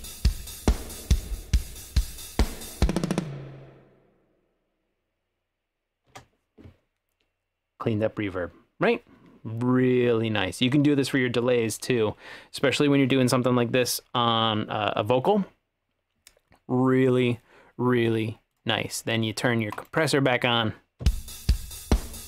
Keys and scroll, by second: 6.1 space, 21.1 space.